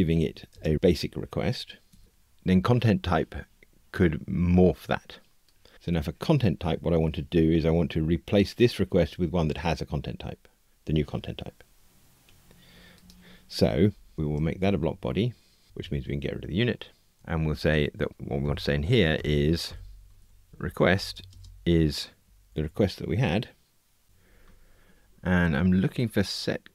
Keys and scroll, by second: 1.9 Tab, 14.1 alt+Return, 18.4 alt+shift+Left.